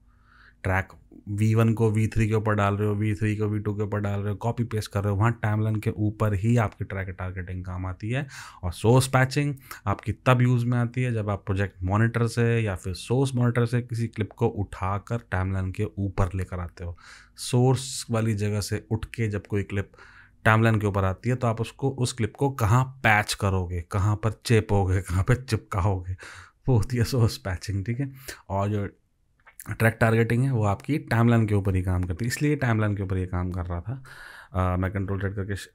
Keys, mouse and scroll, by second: 35.0 ctrl+z, 35.5 ctrl+z.